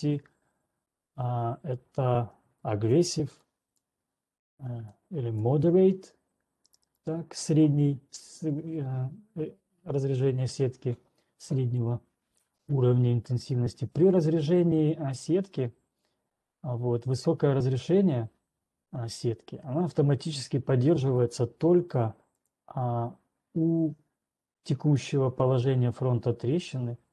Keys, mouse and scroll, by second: 3.5 ctrl+1, 3.5 scroll, 4.2 click, 5.7 click, 6.7 click, 7.9 right click, 9.4 scroll down 2, 22.7 click.